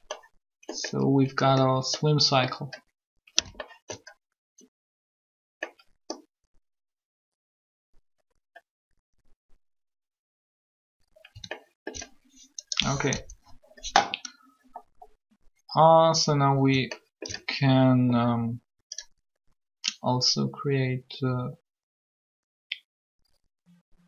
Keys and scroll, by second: 13.0 alt+3.